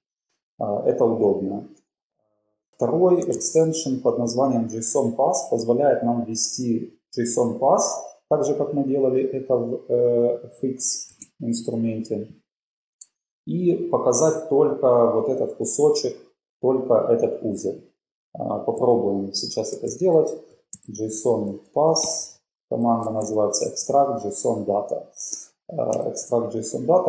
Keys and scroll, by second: 0.0 BackSpace, 0.3 BackSpace, 3.4 shift+super+x, 11.2 super+w, 18.8 super+b, 20.1 shift+super+p, 20.5-23.9 typing, 24.4 Down, 24.6 Up, 26.1 Return.